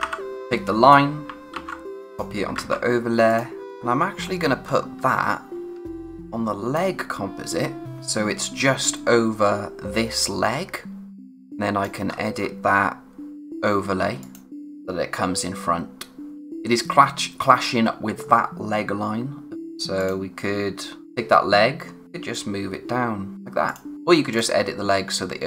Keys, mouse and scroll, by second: 0.0-0.5 typing, 0.3 click, 1.5 ctrl+c, 2.1 click, 3.3 click, 3.8-4.6 scroll down 1, 4.6 space, 5.3-5.7 scroll down 1, 5.7 space, 5.9-6.9 scroll up 1, 11.1 scroll up 1, 11.2 click, 11.4 space, 12.1-13.4 scroll up 1, 13.4 click, 14.9-16.4 scroll up 1, 16.5-17.9 scroll up 1, 18.3 scroll down 1, 19.6 click, 22.0 scroll up 1, 22.3 click, 24.0-24.3 scroll up 1, 24.3 click.